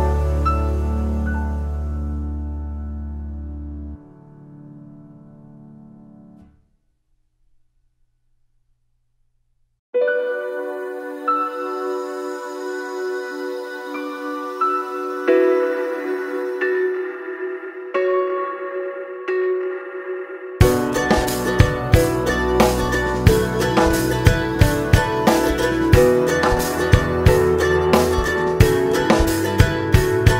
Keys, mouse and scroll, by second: 7.2 click, 7.9 scroll down 2, 8.2-8.7 scroll up 2, 8.7-11.2 scroll up 1, 11.3 click, 12.0 click, 16.1 click, 17.3 KP_Divide, 18.2 click, 18.5 ctrl+shift+click, 18.9 `, 22.1 click, 22.8 ctrl+shift+click, 23.2 click, 23.9 click, 24.6 click, 25.5 ctrl+shift+click, 27.0 `, 28.0-30.3 drag.